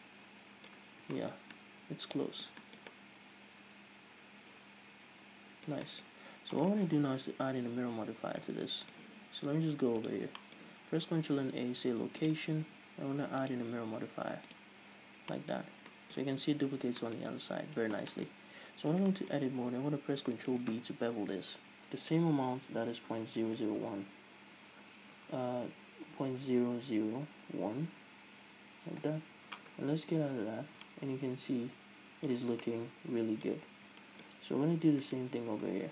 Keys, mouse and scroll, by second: 1.4 scroll down 2, 6.6-7.0 scroll up 2, 7.0 right click, 8.1-8.7 scroll up 1, 8.7 scroll down 1, 8.9-10.5 middle drag, 10.5 click, 10.9-13.9 middle drag, 11.3 ctrl+a, 13.9-15.8 drag, 15.5 scroll down 1, 15.8-18.6 middle drag, 16.2 scroll down 1, 17.1-17.5 scroll up 1, 17.7-18.4 scroll up 1, 18.8-19.3 scroll up 1, 19.3 Tab, 19.6 shift+middle click, 20.4-20.8 scroll up 2, 20.5 middle click, 21.8 ctrl+b, 29.9 Tab, 30.7 scroll down 1, 31.0-35.5 middle drag, 31.0 a, 32.9 scroll down 2, 34.1-34.5 scroll up 2, 35.5 right click.